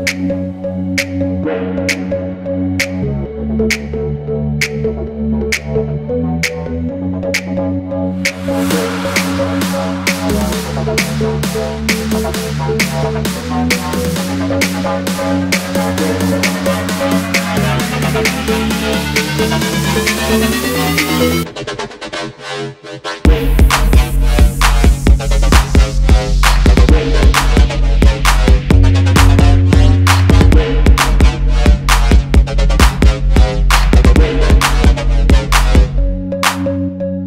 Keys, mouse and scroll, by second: 2.0 alt+scroll up 1, 3.2 alt+scroll down 1, 4.7 alt+scroll up 1, 4.9 Up, 5.1 Up, 5.2 Up, 5.6 double click, 6.1 alt+scroll down 1, 6.9 space, 9.3 right click, 12.7 alt+scroll up 1, 13.2 space, 13.6 alt+scroll down 1, 14.8 shift+click, 15.4 shift+click, 17.5 Right, 18.6 Right, 18.6 Right, 19.3 Left, 19.4 Left, 19.5 Left, 19.6 Left, 19.8 Left, 20.3 shift+click, 21.1 space, 23.1 shift+click, 24.2 Left, 27.0-27.4 alt+scroll down 1, 27.5 alt+scroll down 1, 27.8 alt+scroll up 1, 28.6 alt+scroll up 1, 29.4 double click, 31.3 double click, 34.1 double click, 35.1 alt+scroll up 1, 35.7-36.6 typing.